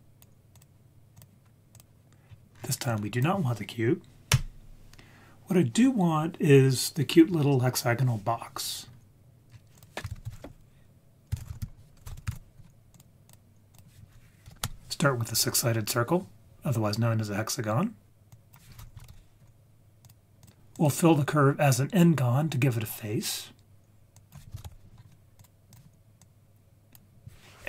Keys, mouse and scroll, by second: 1.7 click, 2.3 scroll down 2, 2.5-3.2 scroll up 2, 2.9 click, 4.3 Delete, 9.5-10.0 scroll up 3, 9.7 click, 10.2 shift+a, 13.7 click, 18.3-19.8 drag, 20.4-20.8 drag, 24.1-25.4 drag, 25.7-26.9 drag.